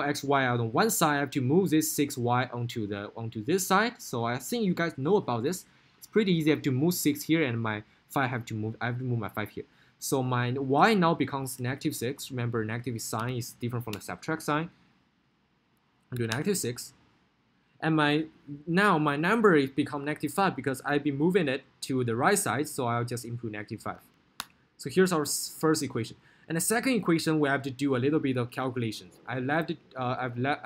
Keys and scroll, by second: 13.4 6, 14.1 Return, 16.4 6, 16.7 Return, 24.4 5, 24.9 Return.